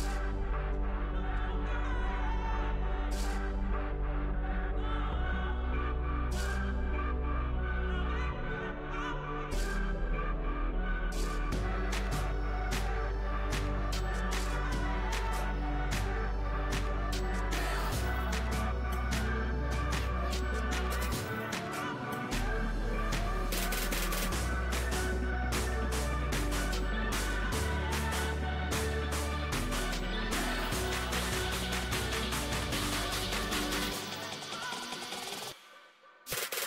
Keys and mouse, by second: 0.0 ctrl+r, 1.2 s, 3.2-4.5 drag, 6.3 a, 6.7 a, 13.9 w, 27.4 z, 27.9 z, 29.0 c, 32.2-35.8 drag, 35.8 ctrl+e.